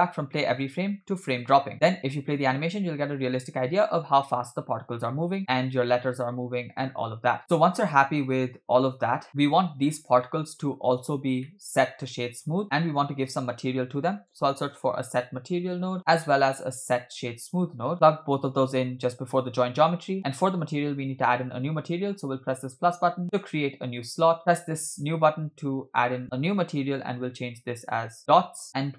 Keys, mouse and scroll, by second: 1.7 space, 9.3 middle click, 9.3 scroll down 2, 10.4 shift+middle click, 10.9-11.3 scroll up 1, 11.5-12.0 shift+middle drag, 12.4-12.8 scroll down 2, 12.6 shift+a, 17.0 shift+a, 19.0-19.8 scroll up 1, 19.8-21.0 scroll up 3, 21.0 click, 22.7 click, 23.9-24.3 drag, 24.4-24.9 drag, 26.2-28.2 drag.